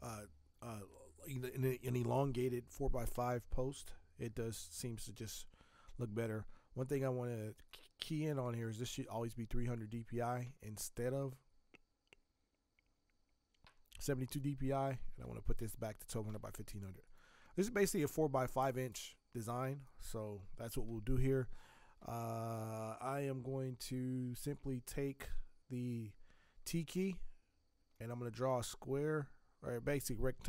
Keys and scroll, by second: 15.6 Tab.